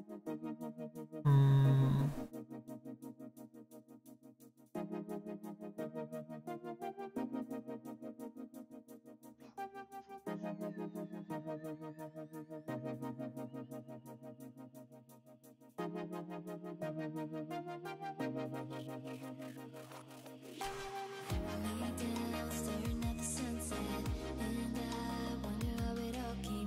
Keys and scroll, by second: 20.3 s, 20.7 ctrl+z, 21.1 ctrl+z.